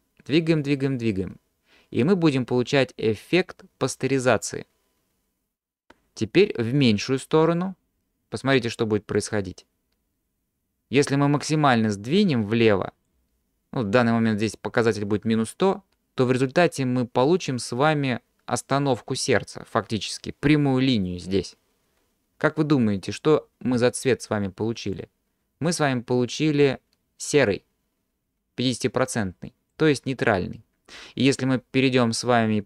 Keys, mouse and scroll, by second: 0.3-4.0 drag, 6.8 click, 11.7-13.1 drag, 25.0-29.7 drag.